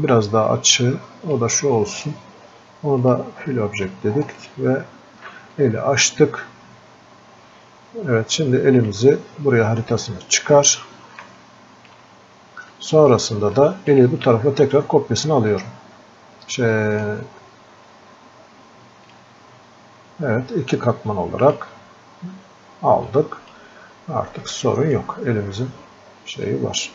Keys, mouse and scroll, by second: 6.7-7.2 scroll up 1, 10.5 scroll up 1, 11.4-26.9 alt+drag, 17.2 typing.